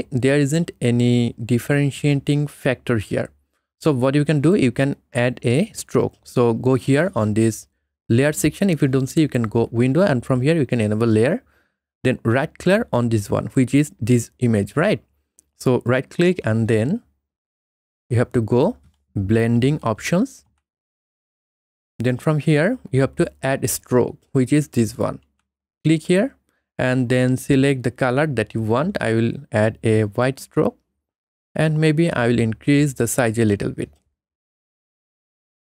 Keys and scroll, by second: 20.3 1.